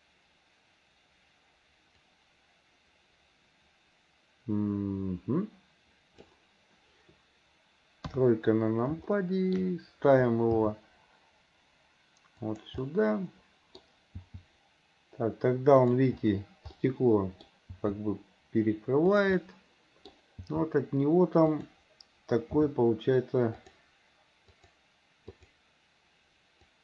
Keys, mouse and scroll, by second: 2.1-6.3 drag, 9.2 shift+middle click, 12.8-13.8 middle drag, 16.8 middle click, 19.4 middle click, 24.6 click, 25.4 click, 26.7-26.8 drag.